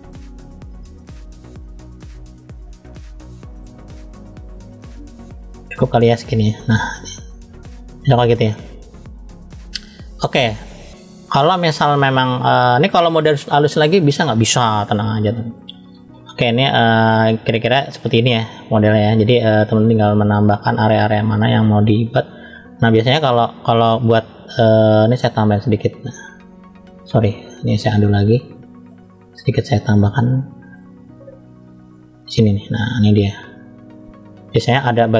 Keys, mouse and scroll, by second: 1.5-2.2 scroll down 2, 2.2 click, 5.1 middle click, 6.2-6.5 scroll down 1, 6.8-7.8 middle drag, 6.8-7.4 scroll down 1, 8.2-8.7 scroll up 1, 9.2-9.7 scroll up 3, 9.8 shift+middle click, 11.2 scroll down 1, 11.7 middle click, 11.7 scroll down 1, 14.7 scroll down 2, 15.3 shift+middle click, 16.2 scroll up 1, 16.9 middle click, 16.9 scroll up 1, 18.4 scroll up 1, 19.6 click, 25.1 click, 27.9 click, 29.0 click, 30.4 click, 34.5 scroll down 1, 35.0 middle click, 35.0-35.1 scroll down 1.